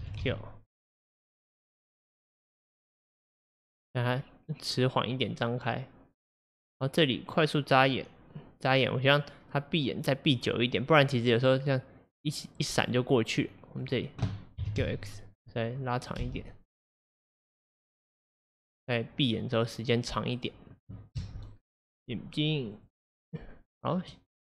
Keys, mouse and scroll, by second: 0.1 s, 3.8-6.8 drag, 11.6-14.7 drag, 14.7 s, 16.3 space, 21.2 space, 22.8 click.